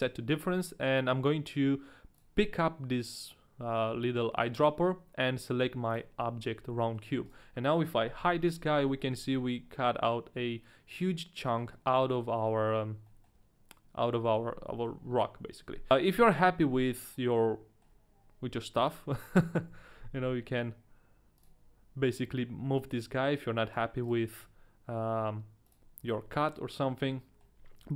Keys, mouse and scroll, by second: 2.1 click, 6.6 a, 6.8 middle click, 7.2 right click, 8.2 h, 8.6 middle click, 9.1 middle click, 9.1 right click, 9.1 h, 9.3 middle click, 12.5-13.0 scroll down 2, 13.0 middle click, 14.1-14.7 scroll up 1, 14.7 middle click, 15.9 click, 15.9 right click, 15.9 a, 16.1-16.9 scroll up 2, 16.9 middle click, 17.8 scroll down 1, 18.8 click, 19.6 KP_1, 20.1 g, 21.4 click, 22.6 g, 23.7 right click, 24.0 right click, 24.4 g, 25.7 click, 26.0 h, 26.4 middle click.